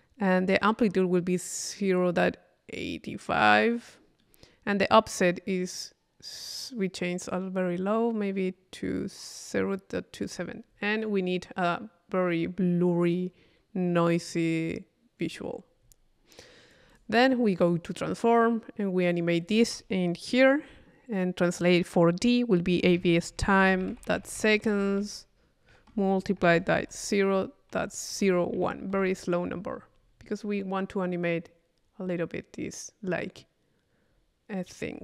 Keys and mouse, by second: 1.0-2.6 middle drag, 3.9 middle click, 5.7-10.5 middle drag, 10.7-11.8 middle drag, 15.8 middle click, 16.4 click, 17.6 click, 19.1-22.7 drag, 30.1-31.2 middle drag, 34.1-35.0 middle drag.